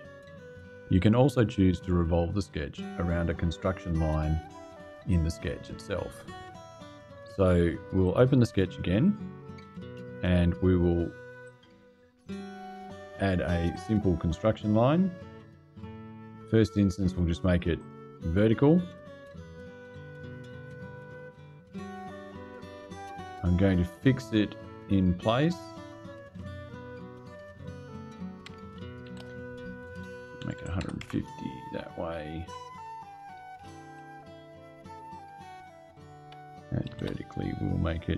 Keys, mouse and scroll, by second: 7.7 click, 8.6 click, 11.1 click, 13.4 click, 16.6 click, 17.5 click, 20.4 click, 25.0 click, 26.0 click, 27.0 click, 28.8 shift+h, 30.1 KP_1, 30.3 KP_5, 30.5 KP_0, 30.7 KP_Enter, 31.9 click, 33.6 click, 35.3 click, 36.6 shift+v.